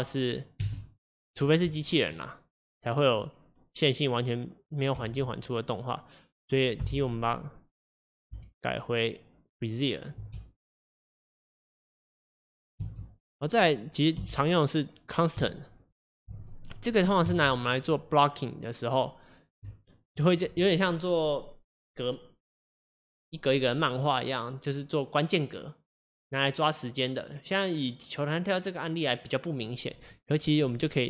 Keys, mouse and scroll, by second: 0.8 space, 2.2-9.8 drag, 9.8 t, 10.2 space, 12.8 space, 15.5 t, 16.8 click, 17.3 space, 19.8-31.0 shift+middle drag.